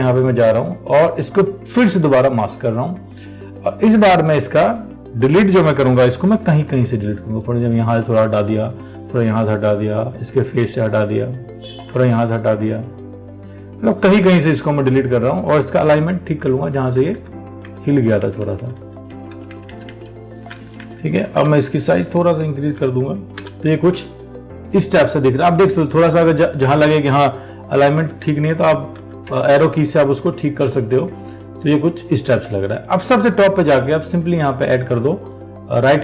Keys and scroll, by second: 21.4 ctrl+t.